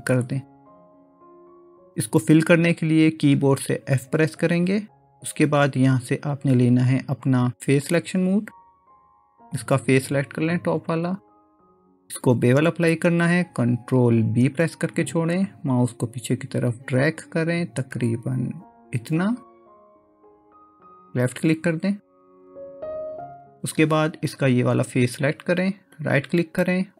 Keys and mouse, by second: 4.1 f, 7.9-9.7 drag, 14.5 ctrl+b, 26.2-26.9 right drag.